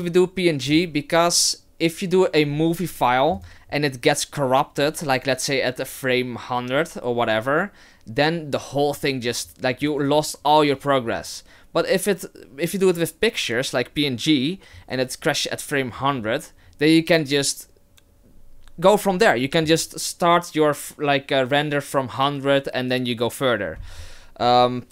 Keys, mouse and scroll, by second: 3.4 click.